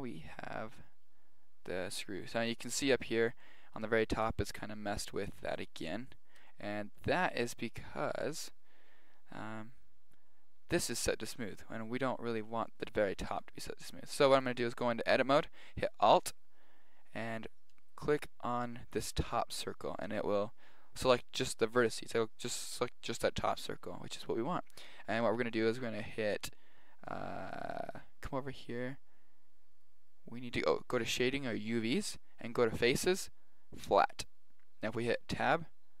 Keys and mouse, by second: 0.2-1.2 middle drag, 2.7-5.6 middle drag, 8.5-9.8 middle drag, 13.3 Tab, 17.7 right click, 30.9 click, 32.8 click, 33.8 click, 35.5 Tab.